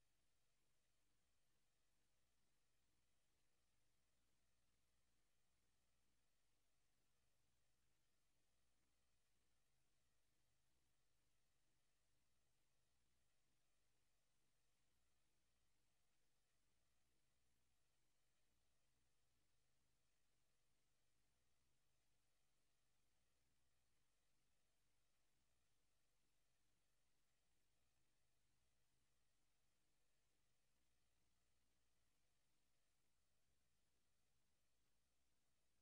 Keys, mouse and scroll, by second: 0.8 right click, 0.8 scroll up 1, 2.4 right click, 3.3 right click, 5.1 KP_0, 6.5 right click, 9.2 right click, 14.7 right click, 16.1 right click, 16.6 right click, 17.0 s, 17.9 right click, 18.4 right click, 23.3 s, 24.6 right click, 25.1 right click, 25.2 s, 26.0 right click, 26.3 s, 27.0 right click, 27.2 right click, 27.5 s, 29.0 right click, 32.2 click.